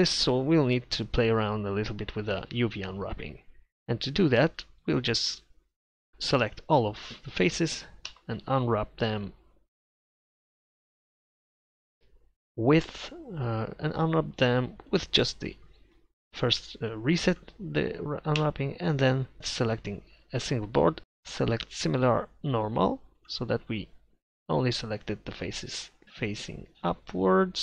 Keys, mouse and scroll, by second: 2.4 KP_7, 6.1 a, 6.5 a, 8.1 u, 16.4 u, 18.5 u, 23.9 middle click.